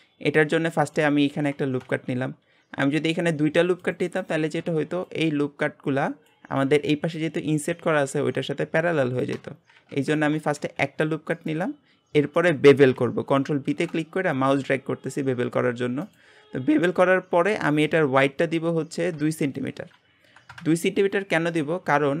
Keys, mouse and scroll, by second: 0.7-1.8 shift+middle drag, 1.8 ctrl+r, 9.9 ctrl+z, 10.6 ctrl+r, 12.1 scroll up 1, 13.7 ctrl+b, 16.5 scroll up 1, 16.8-19.4 shift+middle drag, 19.4-22.2 drag.